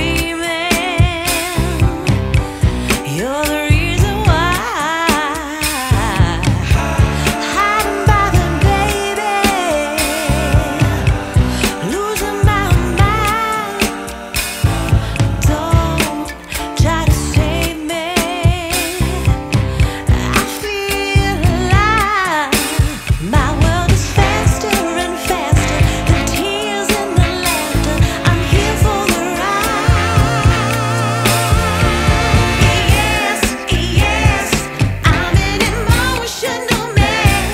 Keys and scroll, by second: 1.4 [, 4.1 [, 5.6 [, 7.3 ], 9.6 [, 10.6 ], 12.1 ], 12.6 [, 13.8 ], 16.2 [, 17.6 x, 18.8 x, 26.0 ], 29.4 v, 34.0 super+g.